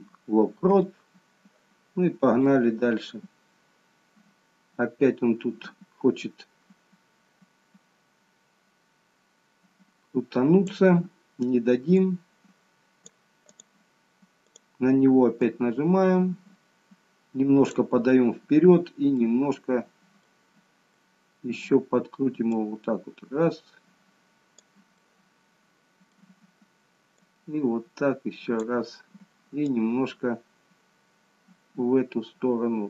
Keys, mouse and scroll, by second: 2.5 click, 12.0 click, 13.6 click, 14.6 click, 15.5 click, 19.2 middle click, 21.1 middle click, 22.6 click, 25.1 middle click, 27.2 click, 29.8 click.